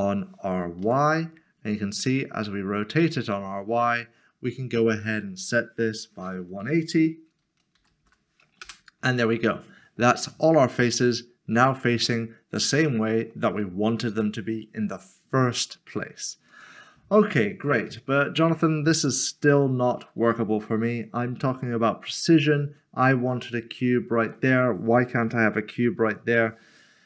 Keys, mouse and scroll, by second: 0.8 typing, 7.7 typing, 8.6 Return, 10.0 Return, 10.2 middle click, 12.4 middle click, 13.0 shift+middle click, 16.5 shift+middle click, 17.9 Tab, 18.9 Tab, 19.7 click.